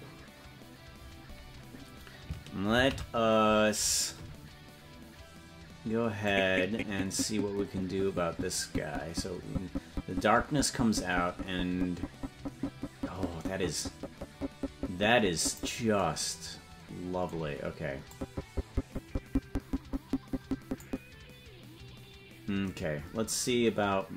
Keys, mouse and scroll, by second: 5.2 ctrl+s, 6.4-16.0 drag, 18.2-21.3 drag.